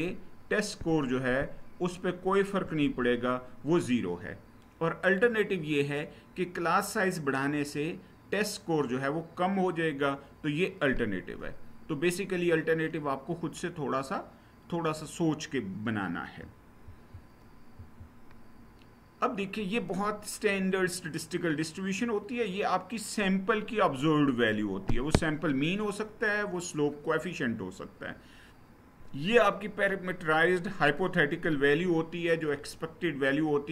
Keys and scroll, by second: 17.5 Right.